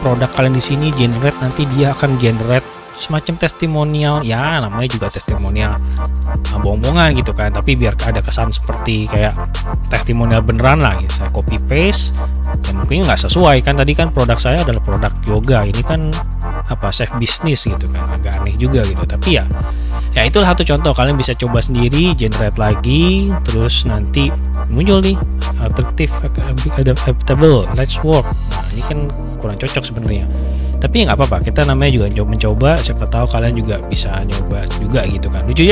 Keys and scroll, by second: 10.0 ctrl+c, 14.9 ctrl+c, 15.2 ctrl+v, 27.0 ctrl+v, 31.8 ctrl+v.